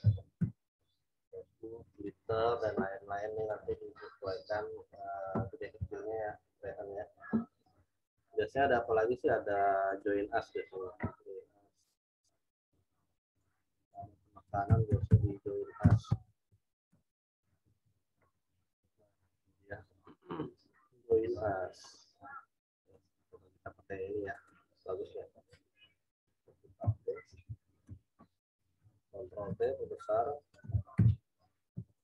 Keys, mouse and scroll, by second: 0.4 Return, 0.7 click, 9.9 click, 10.4-10.9 scroll up 1, 13.4 click, 14.4-17.1 typing, 22.8 click, 24.3 right click, 26.1 click, 26.8 alt+Tab, 27.8 ctrl+v, 28.8 ctrl+t, 29.6 alt+shift+click, 31.0 Return, 31.7 w, 31.8 click.